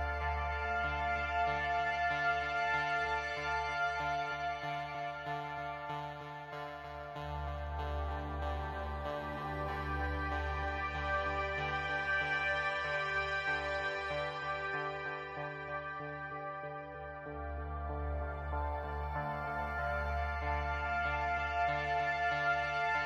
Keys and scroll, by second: 11.5 space, 12.5 space.